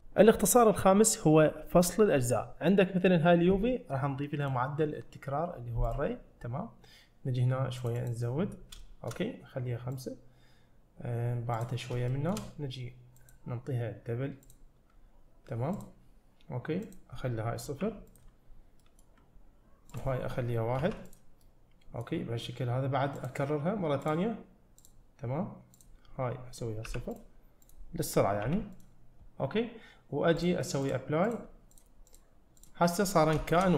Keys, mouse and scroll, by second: 4.5-6.0 drag, 7.8 click, 8.0 click, 9.2 shift+middle click, 10.0 click, 11.6 click, 12.2 shift+middle click, 13.2-14.6 drag, 15.8 click, 16.9-18.2 drag, 18.5-18.9 scroll down 1, 18.9 middle click, 19.9-21.2 drag, 21.5 middle click, 23.2-24.2 drag, 24.9 click, 25.8-27.2 drag, 27.7-28.8 drag, 29.2-30.4 scroll down 1, 30.4-31.0 drag, 31.3 click, 32.2-32.7 drag, 33.6 shift+middle click.